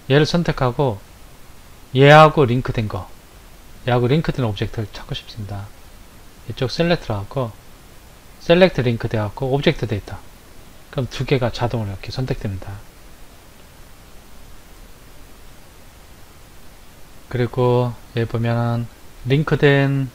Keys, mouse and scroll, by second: 0.0 click, 6.9 click, 14.3 Left, 17.4 click.